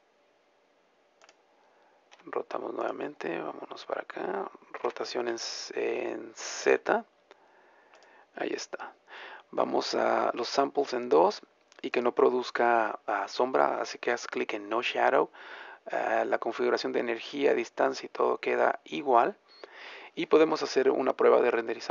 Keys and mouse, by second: 2.3 r, 3.3 middle click, 5.0 r, 8.6-10.6 middle drag, 13.0-14.0 drag.